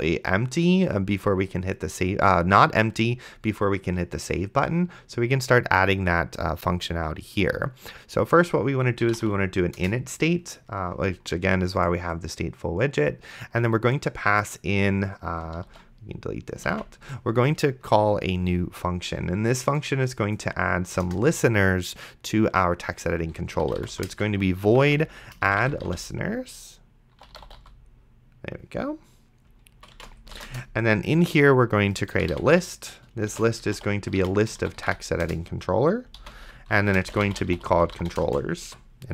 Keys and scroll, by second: 8.9-9.7 typing, 9.8 Return, 15.9 ctrl+x, 16.9 ctrl+s, 17.8 Return, 23.4-28.1 typing, 30.0 shift+9, 30.2 space, 30.5 Return, 32.1-35.4 typing, 36.5-39.1 typing.